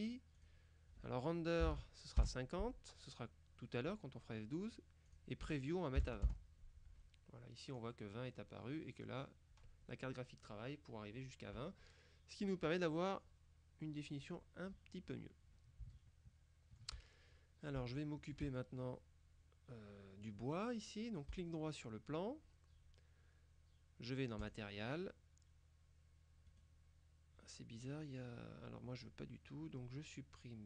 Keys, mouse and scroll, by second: 0.5 click, 1.7 KP_0, 2.3 KP_Enter, 5.1 click, 6.1 KP_2, 6.2 KP_0, 6.3 KP_Enter, 15.4-16.0 scroll up 3, 16.0-17.4 shift+middle drag, 17.4-17.9 shift+scroll down 3, 17.9-18.9 shift+middle drag, 21.4 right click, 24.5 click, 26.6 right click.